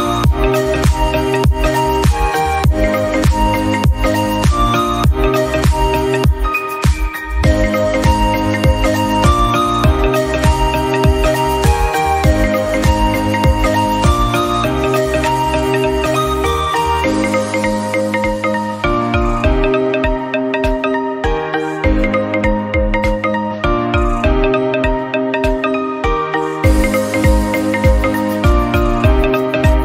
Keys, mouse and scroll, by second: 1.0-1.4 scroll down 5, 1.4 middle click, 1.5 scroll up 3, 1.8-3.0 scroll down 1, 3.0-3.7 scroll down 1, 3.7 shift+middle click, 4.0 scroll up 2, 4.1-4.5 drag, 5.6-6.6 middle drag, 7.8 shift+click, 8.1 shift+click, 9.5 ctrl+l, 9.8 click, 9.9 scroll down 2, 10.0-11.4 middle drag, 11.4 click, 11.7 scroll down 1, 11.9-14.2 middle drag, 14.2 scroll up 1, 14.5 scroll down 2, 14.6-16.7 middle drag, 16.7 KP_1, 16.9-17.7 scroll up 1, 17.7 scroll up 1, 18.0 scroll down 1, 18.1 middle click, 18.4 scroll up 1, 18.6-19.3 scroll down 1, 19.3-20.1 shift+right drag, 21.1-21.7 scroll up 1, 21.7 KP_Decimal, 21.9 scroll down 1, 22.1-22.6 middle drag, 22.6 Tab, 23.5 shift+click, 24.5 x, 24.7 click, 25.1 KP_1, 25.9 e, 26.4 e, 27.1 shift+middle click, 27.5 e, 28.1 e.